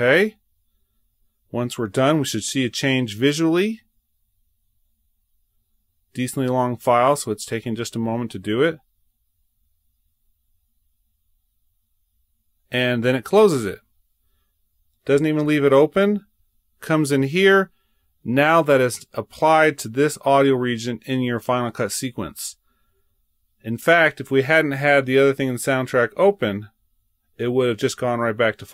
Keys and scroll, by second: 15.3 super+Tab, 25.3 super+Tab, 28.0 super+Tab.